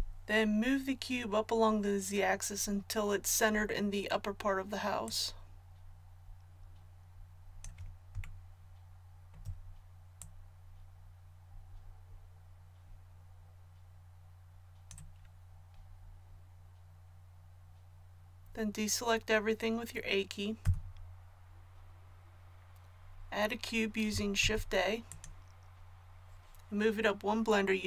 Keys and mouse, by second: 5.0-6.9 drag, 6.9-20.6 middle drag, 20.6 a, 24.4 shift+a.